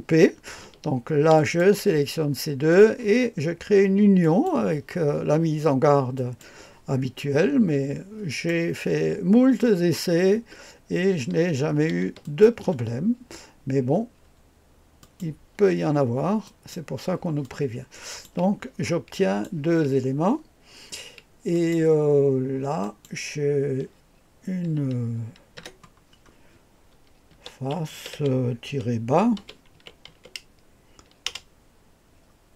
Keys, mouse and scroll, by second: 1.4 ctrl+click, 4.2 click, 6.1 click, 8.3 click, 12.2 ctrl+click, 15.0 click, 16.4 click, 17.4 click, 18.8-19.8 drag, 21.5 click, 22.8 click, 25.6 F2, 27.1-30.6 typing.